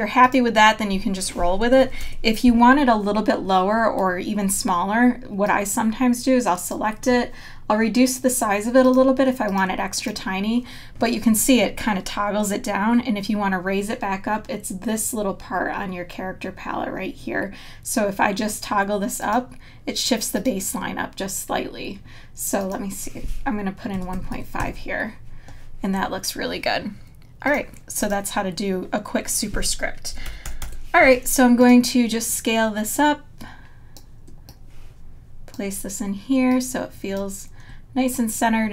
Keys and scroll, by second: 2.5 super+=, 4.5 t, 23.9 KP_1, 24.3 KP_5, 24.6 KP_Enter, 30.7 super+-.